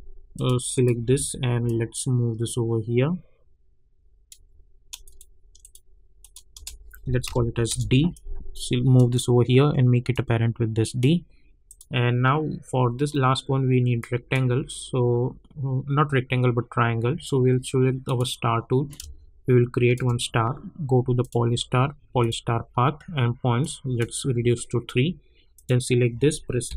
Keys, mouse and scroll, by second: 0.0 Home, 0.3 click, 1.0 v, 1.6-5.0 drag, 6.5 Return, 7.2 d, 7.7 Return, 8.1-11.6 drag, 14.0-25.5 drag.